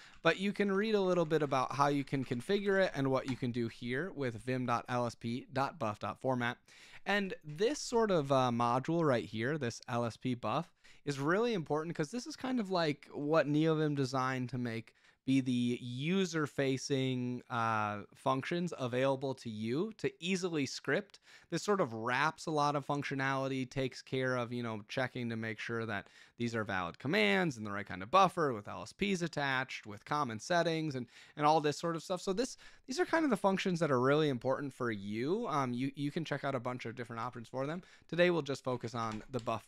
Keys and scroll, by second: 0.0-3.2 typing, 3.2 Return, 37.2 Escape, 37.6 k, 38.7-39.6 typing.